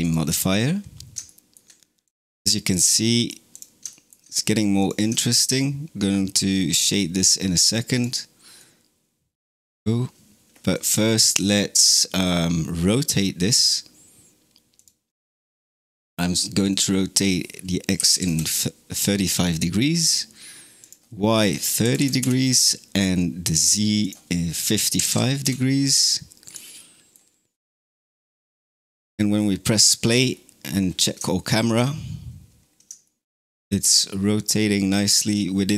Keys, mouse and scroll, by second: 1.1-1.9 shift+middle drag, 1.9 click, 2.3-3.4 middle drag, 3.4 click, 3.8 shift+middle click, 4.6 click, 5.1-7.8 shift+middle drag, 7.8 click, 8.4-10.6 middle drag, 10.6 click, 14.6 click, 16.6-19.7 drag, 20.7-24.9 drag, 24.9 KP_5, 26.3 click, 26.6-27.5 middle drag, 27.5 KP_0, 28.5 space, 29.2-30.0 scroll down 6, 30.2-31.0 scroll up 6, 31.2-32.5 shift+middle drag, 32.5 scroll down 1, 32.9-35.7 shift+middle drag.